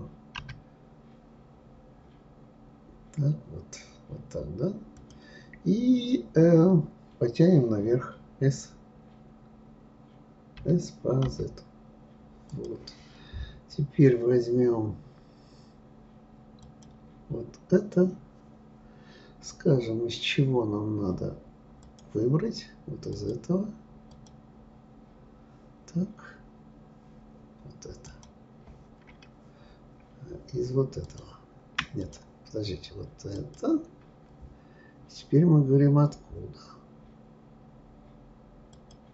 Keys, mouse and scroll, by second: 0.4 s, 10.6 s, 16.6 click, 21.8 click, 24.1 click, 28.1 click, 31.0 shift+click, 32.0 click, 33.4 click, 38.7-39.1 drag.